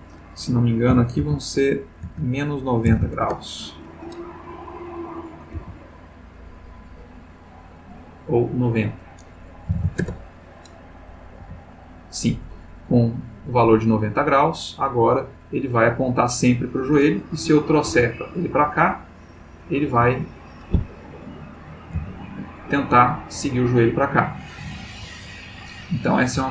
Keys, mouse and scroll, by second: 0.9 -, 1.2 1, 2.0 BackSpace, 2.8 9, 3.2 Return, 5.3 click, 5.6 g, 7.7 click, 8.6 click, 9.7 9, 9.7 0, 10.0 Return, 11.4 g, 16.2 click, 17.1 click, 17.8 g, 18.9 click, 19.6 click, 19.9 g, 20.8 Escape, 21.2 click, 22.0 g, 25.1 click, 25.7 click, 26.3 g.